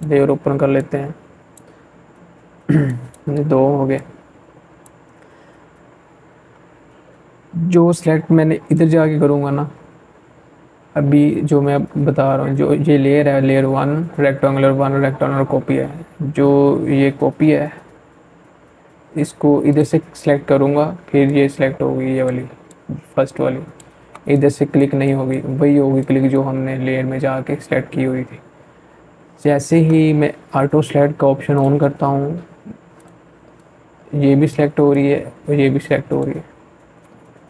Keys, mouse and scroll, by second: 0.7-5.1 drag, 6.5 click, 17.5-27.0 drag, 29.4-37.4 drag.